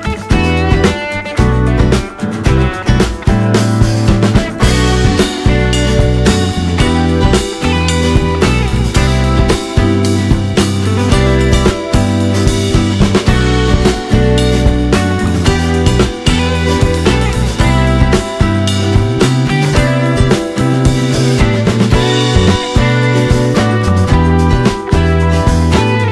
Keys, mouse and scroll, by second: 0.0 click, 1.4 click, 2.6 click, 6.8 click, 7.5 click, 9.1 drag, 9.5 click, 10.8-20.4 drag, 21.6 click, 22.6 click.